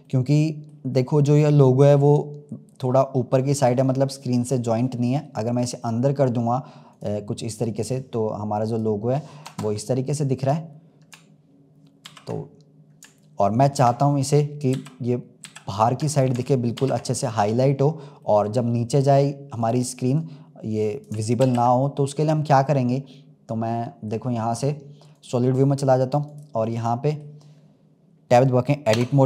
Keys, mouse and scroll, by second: 0.0-1.0 middle drag, 1.0-1.9 scroll up 4, 1.9-6.8 middle drag, 6.8 click, 7.6 click, 9.4 KP_0, 10.4-12.0 drag, 12.0 ctrl+s, 14.7 ctrl+z, 15.4 ctrl+z, 16.0 click, 16.8 ctrl+s, 17.1 click, 17.6-18.0 scroll up 2, 18.2-19.0 middle drag, 19.0-19.5 scroll up 1, 19.5 click, 20.0 click, 21.4 ctrl+z, 21.8-22.4 middle drag, 22.4-25.1 scroll down 4, 25.1 click, 25.8-26.2 scroll up 3, 26.2 click, 26.6-28.8 middle drag, 28.8 Tab.